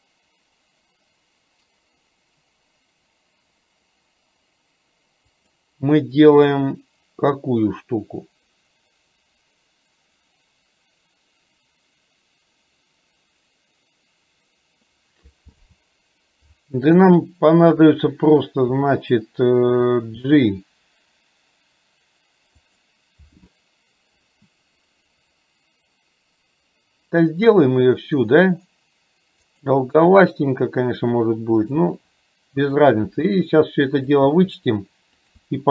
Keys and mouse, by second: 30.1 e, 34.3 e.